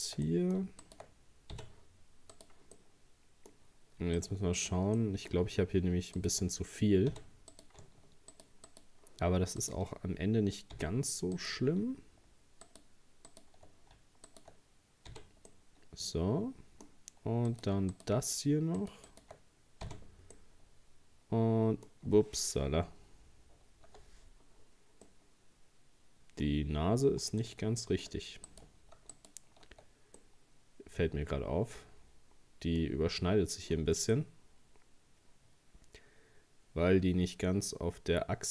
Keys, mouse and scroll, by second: 0.3 middle click, 0.8 shift+right click, 1.5 f, 2.3 right click, 2.7-4.2 middle drag, 4.2 shift+right click, 4.6 shift+right click, 5.0-6.2 middle drag, 6.2 shift+right click, 7.1 f, 7.5 right click, 8.3 shift+right click, 8.7 shift+right click, 9.6 shift+right click, 10.7 f, 11.4 right click, 12.7 shift+right click, 13.3 shift+right click, 14.3 shift+right click, 15.1 f, 15.5-17.5 middle drag, 17.5 right click, 18.0 shift+right click, 18.8 shift+right click, 19.1 shift+right click, 19.9 f, 20.4-23.4 middle drag, 24.6 scroll down 3, 25.1-26.5 middle drag, 26.5 scroll up 2, 27.4-28.5 shift+middle drag, 28.5 right click, 29.1 alt+shift+right click, 30.2-33.2 middle drag, 33.7 scroll down 2, 34.1-37.2 middle drag.